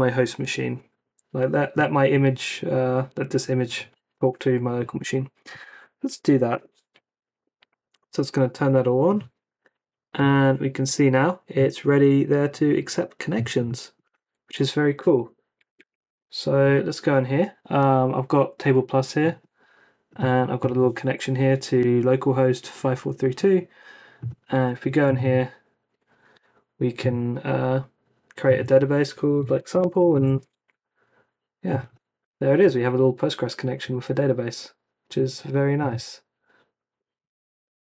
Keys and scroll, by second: 6.0 Up, 6.5 Return, 9.7 Up, 10.1 Return, 14.9 super+Tab, 29.3-30.6 typing.